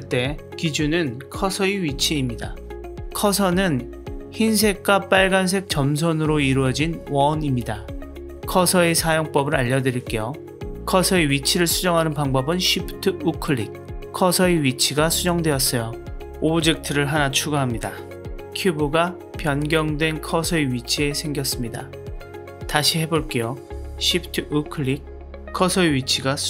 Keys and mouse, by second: 0.0 g, 13.4 shift+right click, 15.9 shift+a, 20.2 s, 21.7-23.0 middle drag, 23.1 g, 25.0 shift+right click, 25.5-26.4 middle drag.